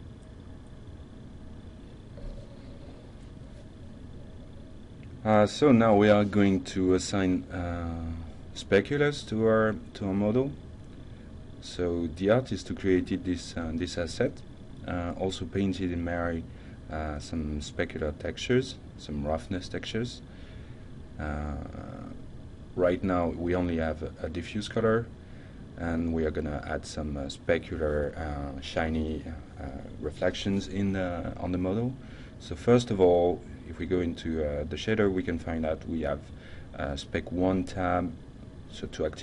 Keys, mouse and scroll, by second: 6.0 ctrl+shift+F10, 6.0 alt+Tab, 6.0-7.1 drag, 7.5-8.1 alt+drag, 8.5-8.8 alt+middle drag, 9.1 alt+right click, 9.6 alt+middle drag, 10.2 alt+drag, 10.7-11.0 alt+right drag, 11.2 alt+click, 11.9-12.4 alt+middle drag, 12.6 alt+right click, 13.0 alt+click, 13.6 alt+middle click, 14.2-14.6 alt+drag, 14.9 alt+right click, 15.6 alt+middle click, 16.9-17.9 shift+middle drag, 37.7 click, 38.2-38.8 drag.